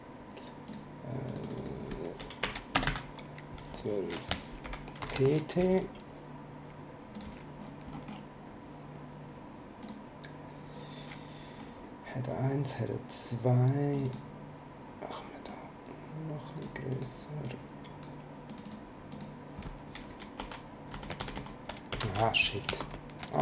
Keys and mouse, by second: 0.7 click, 2.4 Right, 2.7 space, 2.8 KP_1, 2.9 KP_2, 4.6 shift+p, 5.0 shift+t, 7.1 click, 9.8 click, 13.9 click, 15.5 click, 16.9 click, 18.5 click, 20.4 Left, 21.2 ctrl+shift+Left, 21.9 Down, 22.8 shift+BackSpace.